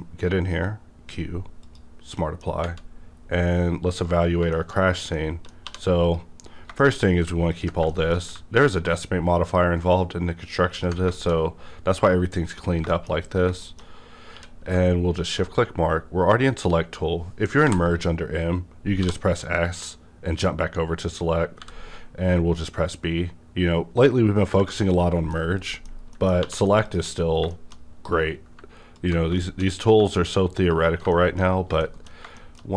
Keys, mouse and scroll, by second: 1.6 click, 1.7 click, 1.7 q, 2.2 middle click, 2.5 scroll up 1, 4.0 scroll down 1, 4.5-4.8 shift+middle drag, 4.7 scroll down 1, 5.1 middle drag, 5.6 2, 6.0 click, 6.5 scroll down 1, 6.8 shift+middle click, 7.5 ctrl+click, 7.5 ctrl+click, 7.9 shift+middle click, 9.4 ctrl+click, 11.1 shift+middle click, 11.4-12.8 scroll up 1, 12.9 shift+middle click, 13.1 shift+scroll up 2, 13.6 middle click, 13.8 middle click, 13.8 scroll up 1, 14.3 q, 15.1 shift+click, 17.6 m, 19.0 s, 21.6 b, 21.6 s, 24.6 space, 24.6 b, 25.0 scroll down 2, 25.3 middle click, 26.4 2, 26.8 click, 27.1 scroll down 1, 27.5 shift+middle click, 28.9 ctrl+click, 29.3 shift+middle click, 29.4 shift+middle click, 30.7 shift+middle click, 31.1 middle click, 31.2 scroll down 1, 31.8 shift+middle click, 31.8 scroll down 1.